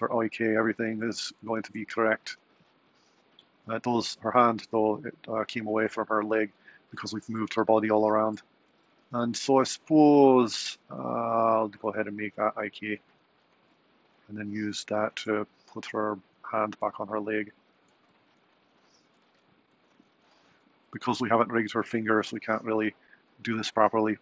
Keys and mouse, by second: 1.2 a, 1.7 i, 4.4 click, 13.7 click, 15.4 g, 18.5 r, 22.0 r.